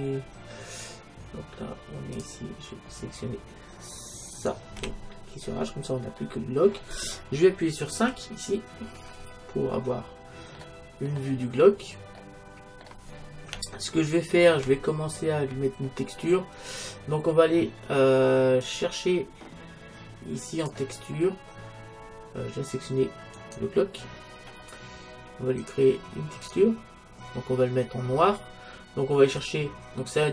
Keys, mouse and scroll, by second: 2.2-4.0 drag, 4.4-6.1 right drag, 4.8 h, 6.1-7.9 middle drag, 8.0 KP_5, 9.2 middle click, 12.3-15.5 middle drag, 15.5-17.0 scroll up 1, 17.0-18.7 scroll up 1, 18.7-20.6 drag, 23.5-25.1 right drag, 25.6-28.4 drag, 29.4-30.3 drag.